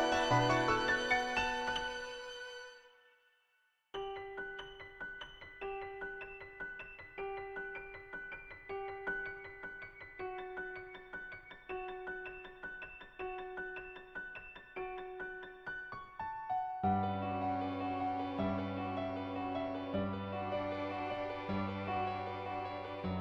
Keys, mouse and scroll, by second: 0.4 middle click, 3.7 click, 6.3-9.6 drag, 11.4 shift+click, 11.6-12.8 middle drag, 13.9 click, 15.0 click, 17.0-18.5 middle drag, 20.5 middle click, 22.6-23.2 middle drag.